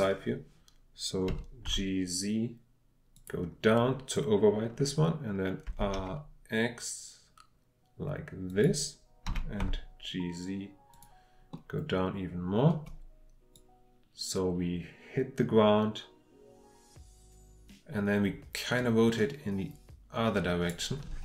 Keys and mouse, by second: 1.3 g, 1.6 z, 3.1 click, 5.6 r, 8.5 click, 10.9 click, 11.6 click, 12.3 middle click, 13.5-15.6 drag, 15.6-17.7 middle drag.